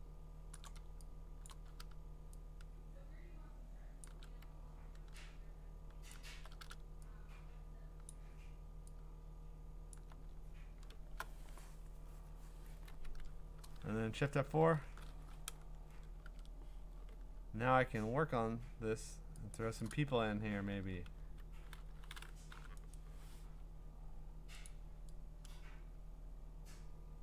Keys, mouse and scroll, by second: 0.5 shift+click, 1.5 click, 4.0 shift+click, 6.1 alt+click, 8.1 alt+click, 8.1 shift+click, 9.9 alt+click, 10.4-12.2 scroll down 11, 14.5-14.8 scroll, 14.8 F4, 16.2 ctrl+Tab, 17.6-18.8 scroll, 19.6 click, 19.9 click, 21.2 b, 22.5 u, 22.9 right click, 23.7-24.7 scroll, 24.7 click.